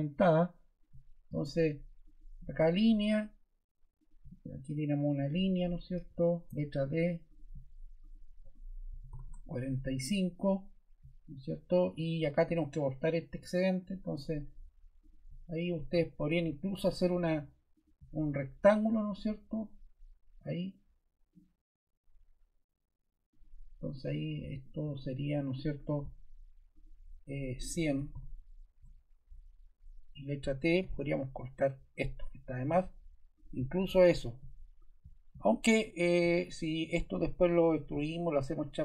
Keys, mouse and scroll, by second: 5.2 click, 6.0 ⟲, 6.5 d, 7.3 click, 8.0 click, 8.6-9.6 typing, 24.6-25.3 typing, 27.4-28.6 typing, 28.7 Return, 30.8 t, 36.0 click, 36.9 click.